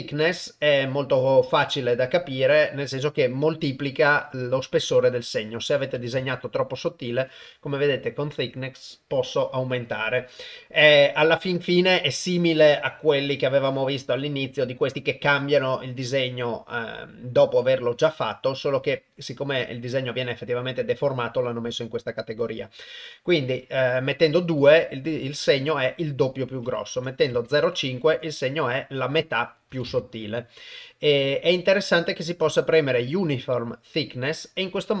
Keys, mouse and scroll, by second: 3.7 click, 5.1 click, 5.9 click, 11.2-22.6 drag, 26.4 click, 29.4 click.